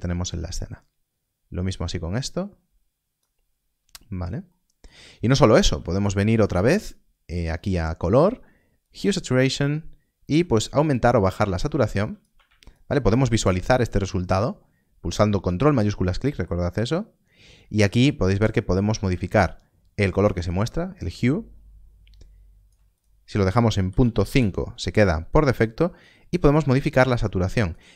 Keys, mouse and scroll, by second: 4.4 click, 4.4 middle click, 5.8 shift+a, 8.7 shift+a, 12.6 ctrl+shift+click, 13.5 middle click, 13.8 scroll down 1, 15.5 scroll up 1, 16.2 middle click, 18.3 click, 22.9 click, 23.8 Left, 24.2 Return, 25.9 click.